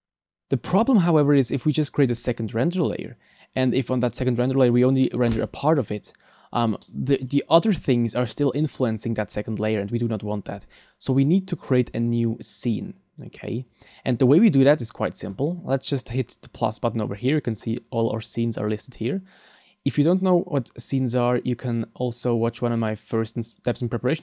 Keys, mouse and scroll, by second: 6.8 middle click, 17.5 click.